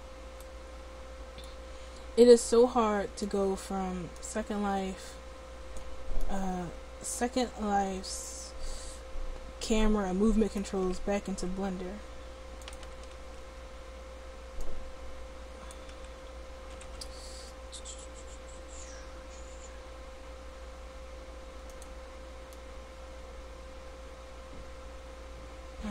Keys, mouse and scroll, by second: 4.3-6.2 drag, 11.4 r, 13.4 ctrl+z, 16.8 r, 22.0-23.7 drag.